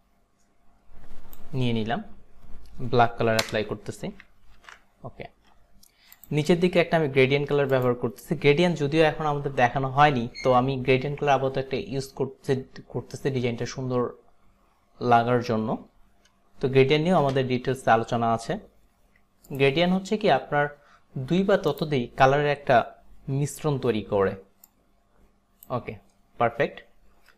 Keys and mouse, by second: 3.4 alt+BackSpace, 4.7 ctrl+d, 6.2 click, 7.7 click, 17.4 g, 19.5 click, 21.8 click, 24.7 click.